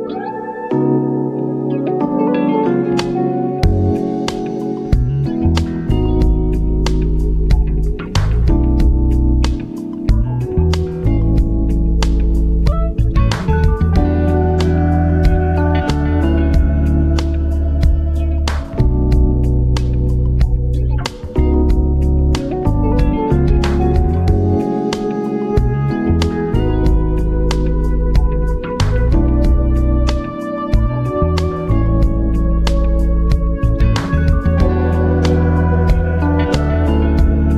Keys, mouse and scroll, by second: 3.4 click, 4.1 shift+click, 5.9 ctrl+t, 7.3-8.6 drag, 8.6 Return, 8.8 v, 9.1 shift+Right, 10.6 shift+Down, 11.6 shift+Left, 12.1 shift+Up, 13.4 shift+Left, 15.1 shift+Down, 16.4 click, 17.2 scroll down 1, 18.1 shift+click, 19.1 Up, 19.8 Left, 29.3-30.0 scroll down 1, 30.0 click, 34.5-37.5 drag.